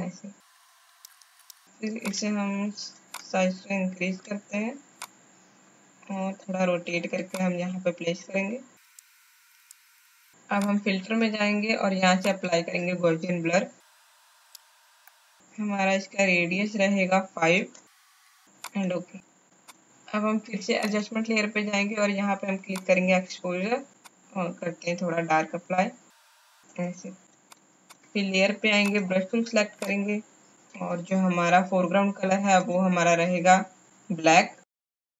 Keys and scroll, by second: 17.6 KP_5.